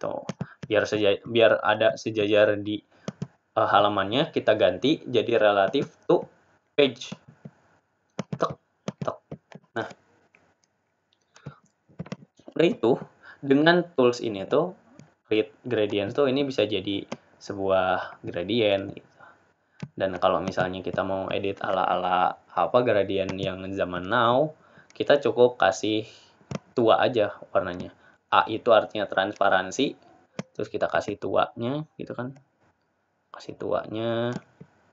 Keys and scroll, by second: 4.1 ctrl+a, 4.1 Return.